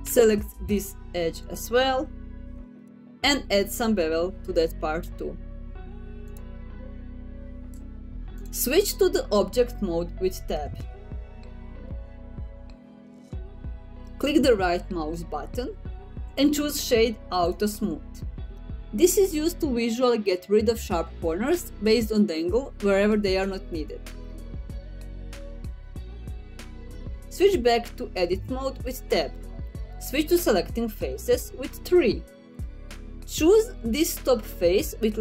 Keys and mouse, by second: 3.6 alt+click, 6.7 ctrl+b, 8.5 click, 11.4 middle click, 12.8 Tab, 14.1-15.1 middle drag, 18.6 right click, 28.6 Tab, 29.4 middle click, 30.9 3, 32.4 middle click.